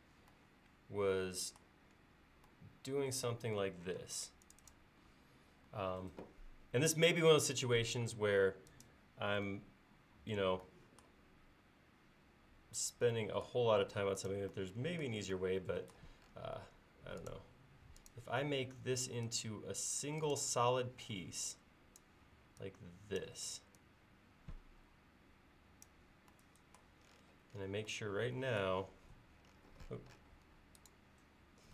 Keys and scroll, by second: 4.0 space, 5.5 l, 7.9 p, 16.6 l, 18.3 l, 21.0 e.